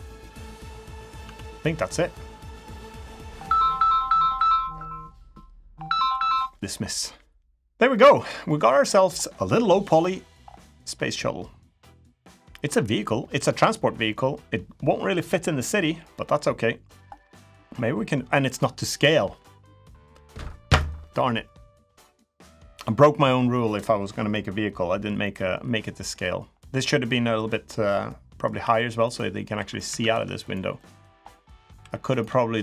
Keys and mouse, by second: 1.0 Tab, 1.4 middle click, 2.4 middle click, 7.7 middle click, 8.2 middle click, 10.9 middle click, 11.6 middle click, 15.9 middle click, 17.1 middle click, 23.4 middle click, 24.1 middle click, 25.0 middle click, 26.3 middle click, 27.8 middle click, 28.4 2, 29.3 2, 29.6 Tab, 29.9 2, 30.2 click, 30.5 middle click, 31.5 3, 31.9 click.